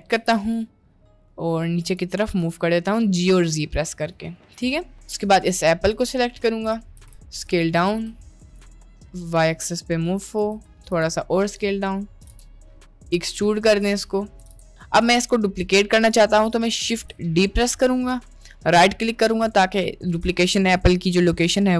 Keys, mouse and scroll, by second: 0.2 g, 2.7 middle click, 3.5 middle click, 4.1 middle click, 4.8 middle click, 5.5 click, 7.1 s, 8.5 g, 9.7 middle click, 10.4 s, 11.5 middle click, 12.3 g, 13.6 middle click, 14.5 g, 15.1 middle click, 16.1 middle click, 16.9 shift+d.